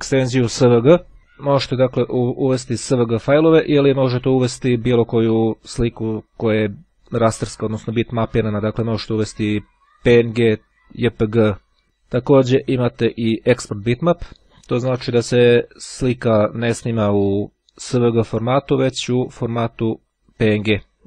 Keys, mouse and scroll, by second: 11.8 click, 12.3 click, 18.8 click.